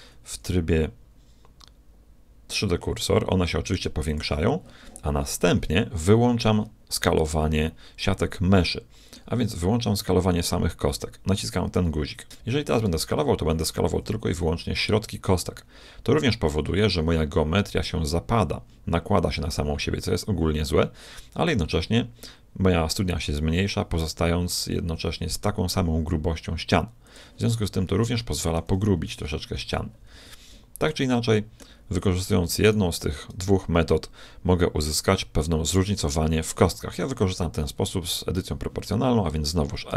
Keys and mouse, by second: 0.3 s, 7.2-9.0 middle drag, 11.4 click, 12.8 s, 27.5-29.5 middle drag, 29.1 ctrl+z, 30.1 ctrl+z, 32.6 click, 32.8-34.3 right drag, 37.9 middle click, 39.9 s.